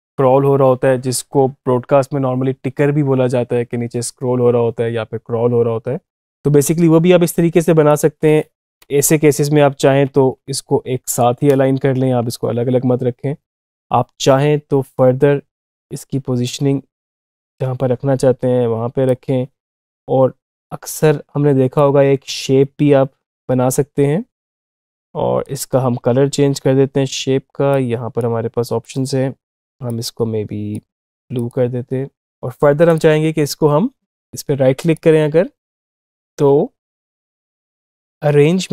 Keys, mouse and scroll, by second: 7.7 click, 9.9 space, 10.9 click, 12.1 space, 15.5-27.5 drag, 27.5-30.9 drag, 34.6 right click.